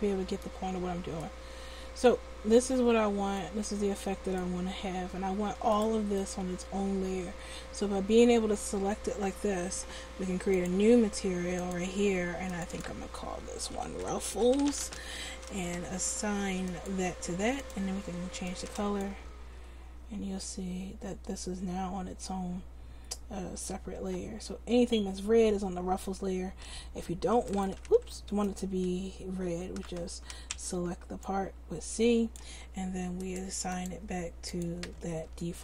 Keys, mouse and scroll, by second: 1.9 c, 5.8-7.5 drag, 10.6-14.6 drag, 14.3 f, 16.7 click, 19.5 Tab, 24.0 Tab, 26.6 s, 27.8 ctrl+z, 30.5 c, 33.4 right click, 33.8-35.0 drag, 35.4 Tab.